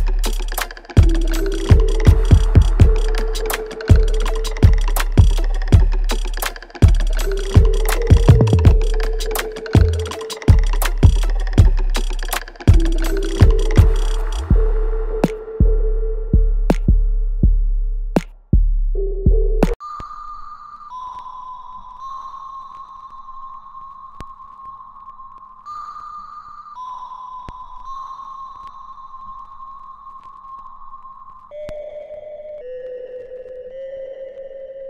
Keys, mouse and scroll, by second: 2.4-3.0 scroll down 1, 3.0-3.7 scroll up 1, 3.7 click, 6.1 alt+click, 6.9 alt+middle click, 7.3 alt+right click, 8.8-15.2 drag, 19.6-22.2 alt+drag, 22.2-25.4 ctrl+drag, 25.4 alt+click, 26.5-28.7 ctrl+drag, 28.7 right click, 29.5 click, 29.8-31.1 alt+drag.